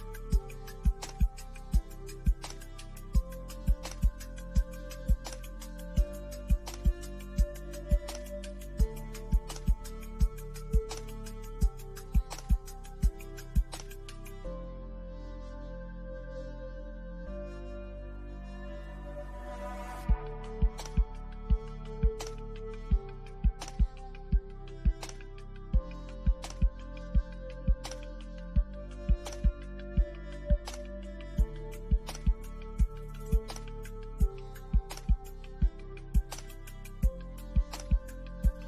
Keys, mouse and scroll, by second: 1.3 click, 8.7 scroll down 1, 10.0 click, 10.9 scroll down 1, 11.3-16.1 shift+middle drag, 16.1 click, 17.8 scroll down 1, 19.3 click, 20.5 Left, 23.1 click, 23.7-24.5 scroll down 1, 26.6 click, 28.2-28.9 scroll up 1, 28.9-32.6 drag, 32.8 click, 34.1 middle click, 34.7 scroll down 1, 35.0-37.8 middle drag, 37.8 click.